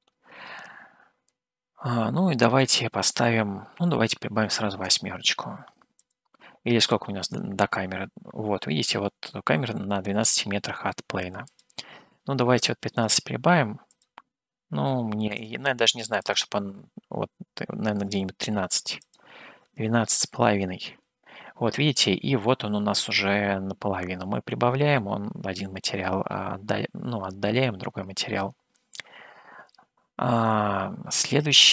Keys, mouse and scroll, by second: 3.1-7.8 drag, 11.8-13.2 drag, 14.2-15.7 drag, 16.3-18.1 drag, 19.0-21.4 drag, 23.1-23.5 scroll down 2, 24.4 scroll up 2, 25.3 scroll up 1, 25.9 scroll down 3, 26.8 scroll down 1, 28.8 middle click, 30.5-31.7 middle drag.